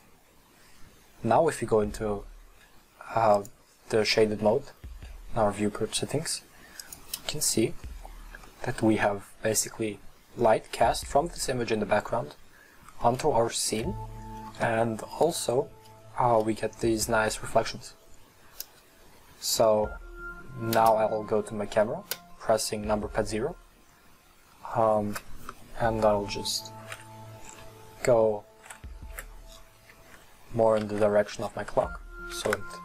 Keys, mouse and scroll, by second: 3.3 click, 4.2-6.8 middle drag, 6.8 click, 8.0 scroll up 2, 8.4-16.5 middle drag, 22.1 KP_0, 26.8 shift+f, 29.8 click, 29.8 middle click.